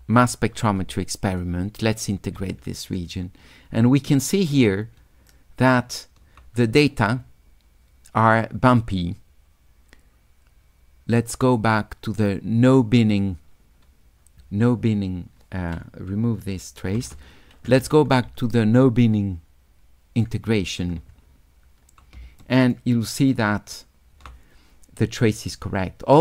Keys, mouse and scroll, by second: 0.9 s, 1.0-2.1 drag, 4.1 shift+click, 5.3 shift+click, 8.8 click, 12.7 click, 15.7 click, 18.3 s, 18.5-20.3 drag, 22.5 shift+click, 23.3 shift+click.